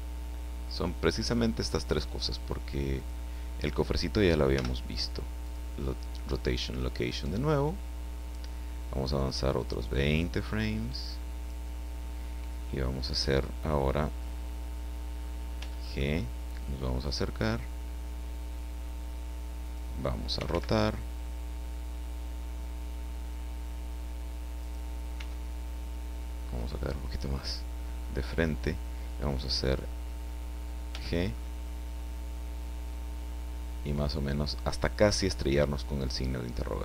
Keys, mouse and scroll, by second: 3.0 click, 4.5 i, 6.7 click, 10.0-11.6 drag, 15.5 g, 15.8 middle click, 19.6 click, 20.3 r, 24.6 click, 25.1 r, 27.4 click, 30.9 g, 31.3 click, 34.6 click.